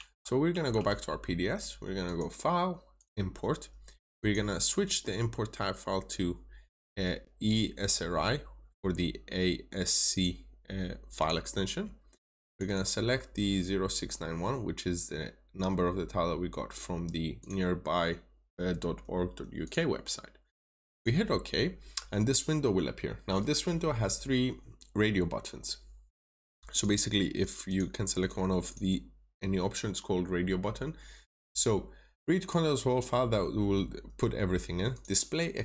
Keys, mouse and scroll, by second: 0.5 alt+Tab, 2.0 click, 5.8 scroll down 1, 10.0 click, 12.5 double click, 13.1-14.4 scroll down 1, 14.6-17.3 scroll up 1, 17.3 click, 27.6 double click, 28.1 click, 28.5 double click, 34.8 click.